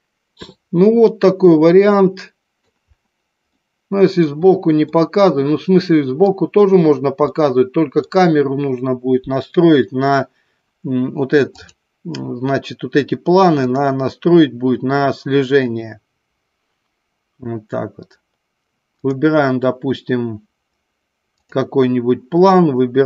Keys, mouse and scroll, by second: 1.4-2.7 middle drag, 2.7 scroll down 1, 3.7 middle click, 5.1-6.6 middle drag, 7.4 scroll up 1, 7.6 middle click, 13.7 drag.